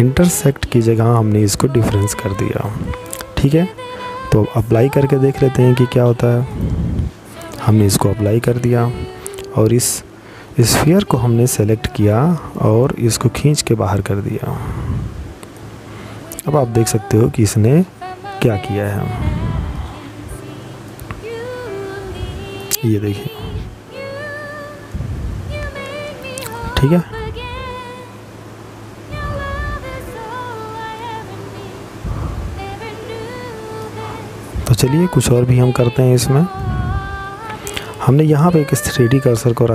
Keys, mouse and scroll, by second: 4.1 click, 8.7 right click, 10.2 click, 14.3 middle click, 18.5 click, 21.3-22.6 scroll up 2, 22.6 middle click, 31.9-33.3 scroll down 4, 33.3-34.2 scroll down 2, 34.2 middle click, 36.4 click, 39.2 click.